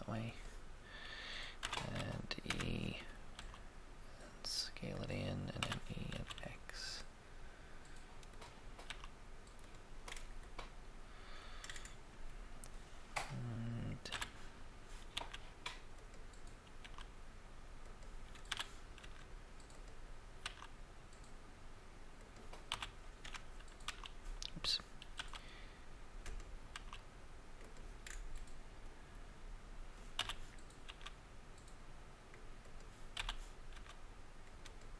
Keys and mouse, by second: 1.5 e, 1.7 e, 2.4 Escape, 3.3 s, 3.5 s, 5.6 e, 6.1 x, 8.8 s, 9.0 s, 11.6 middle click, 14.0 e, 14.1 e, 15.1 x, 16.7 s, 16.9 s, 18.4 e, 18.9 e, 19.0 x, 20.5 s, 22.7 e, 22.8 e, 23.3 1, 26.7 s, 28.0 middle click, 30.1 e, 30.3 e, 30.8 x, 33.2 e, 33.7 x.